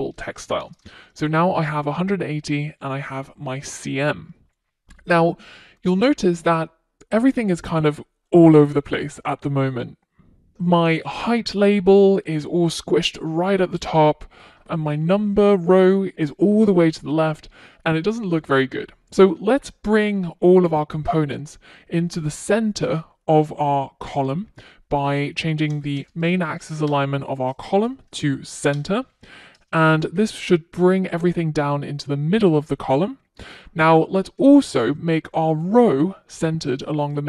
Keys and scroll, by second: 0.1 super+s, 4.4 super+s, 26.4 Return, 28.9 Return, 29.0 super+s.